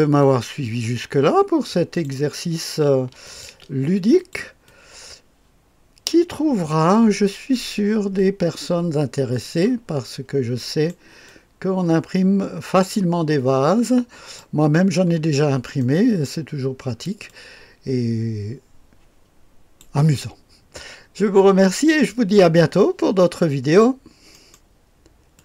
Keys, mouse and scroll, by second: 0.2-2.1 drag, 3.3 click, 3.5 space, 4.2 click, 4.7-9.5 drag, 10.6 right click, 11.3-14.4 drag, 15.8 click, 17.3-19.8 drag, 24.3 click.